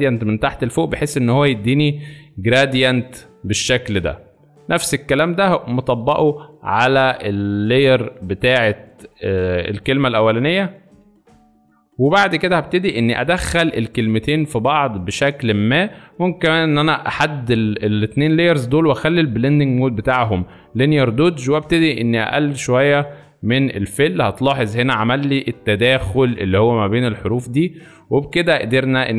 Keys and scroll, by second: 7.0 ctrl+z, 12.9 v.